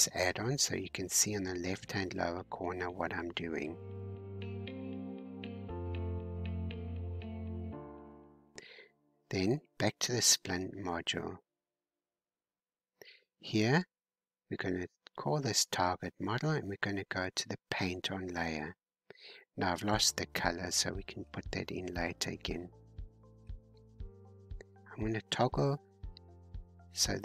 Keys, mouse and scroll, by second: 4.4-6.6 drag, 11.3-12.4 drag, 13.6 click, 14.3-16.2 scroll down 5, 16.2-19.2 drag, 19.6-22.6 scroll up 2, 22.6 scroll up 1, 24.9-27.2 drag.